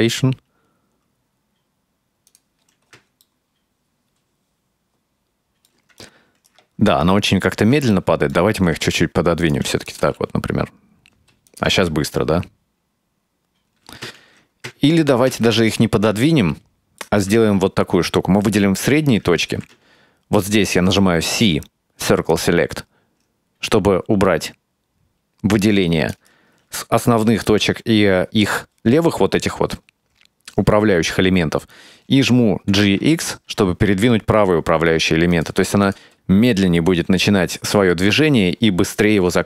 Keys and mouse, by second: 3.3-5.8 ctrl+middle drag, 6.0 right click, 7.1 ctrl+middle click, 8.0 shift+middle click, 8.7 g, 9.9 click, 10.0 space, 11.2 space, 11.5 click, 13.9 space, 14.2 ctrl+z, 14.8 ctrl+z, 15.4 ctrl+z, 16.3 ctrl+middle click, 17.4-18.5 right drag, 19.5 c, 32.8 g, 35.9 click, 36.0 space, 36.1 space, 37.1 space.